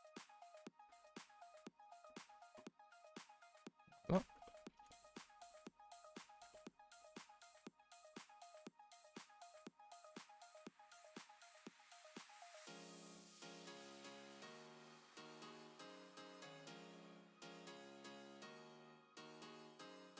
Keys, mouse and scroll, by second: 0.5 click, 1.3 g, 2.3 click, 2.8 Tab, 3.1 z, 3.6 scroll down 2, 4.4 middle click, 4.7-5.4 scroll up 7, 5.1 shift+middle drag, 5.6-6.6 middle drag, 6.6-7.0 scroll up 2, 7.0 middle click, 7.8 click, 8.1 shift+middle drag, 8.3 scroll up 2, 8.5 Tab, 8.8 middle click, 9.3 click, 10.3 KP_7, 10.8-12.1 scroll up 9, 11.1 shift+middle click, 11.6 shift+middle click, 12.1 g, 13.1 middle click, 13.9-14.8 scroll down 9, 14.2 shift+middle click, 14.8 shift+middle click, 15.4-16.1 scroll up 5, 15.5 shift+middle click, 16.1 middle click, 16.7 g, 17.5-18.2 middle drag, 18.2 click, 18.5 g, 19.9 g.